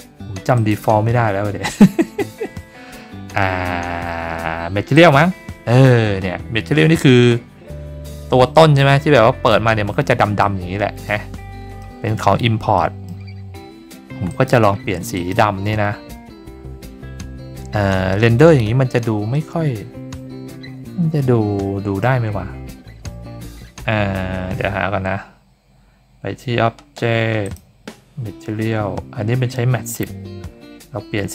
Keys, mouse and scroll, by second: 0.5 click, 4.9 click, 6.4-7.3 scroll up 5, 7.3-8.7 scroll down 6, 8.7-9.4 middle drag, 9.7-10.4 scroll up 4, 10.4-11.0 middle drag, 11.3 scroll down 2, 11.8-12.2 middle drag, 12.7-13.0 middle drag, 13.4 scroll down 1, 14.3 click, 15.1 click, 16.7 scroll up 2, 17.0 scroll down 2, 17.9-18.2 middle drag, 18.6 scroll down 3, 19.3-22.0 middle drag, 22.9 scroll down 3, 24.1 scroll down 4, 25.6-26.4 scroll up 2, 27.4 click, 28.4 middle click, 28.5 click, 28.5-29.0 scroll up 3, 30.8 middle click, 30.8 scroll down 2.